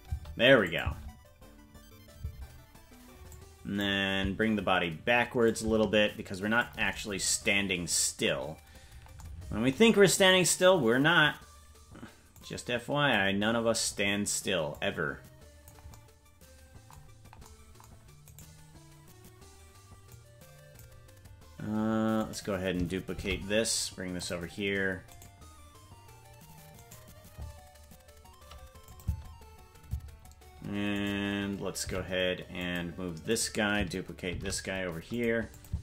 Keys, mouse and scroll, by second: 0.6 click, 0.6 space, 0.8 space, 3.3 click, 3.3 space, 5.4-6.7 drag, 10.3 right click, 12.3 click, 14.7-15.7 drag, 18.4 right click, 20.1 click, 22.1 right click, 23.1 shift+d, 25.3 right click, 27.2 right click, 28.8 click, 29.0 space, 31.0 right click, 31.0 space, 31.8 g, 33.3 right click, 34.2 shift+d, 35.5 click, 35.7 space.